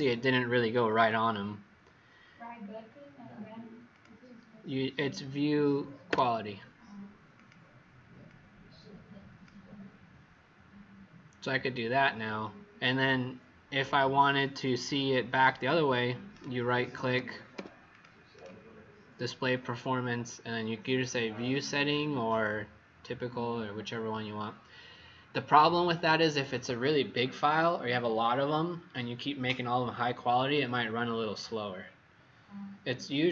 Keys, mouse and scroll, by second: 1.2-1.6 alt+scroll down 2, 2.1-3.8 alt+scroll down 5, 3.9 click, 6.0 a, 7.3 click, 16.2 right click, 16.9 Escape, 17.5 v, 17.9 click, 18.2 right click.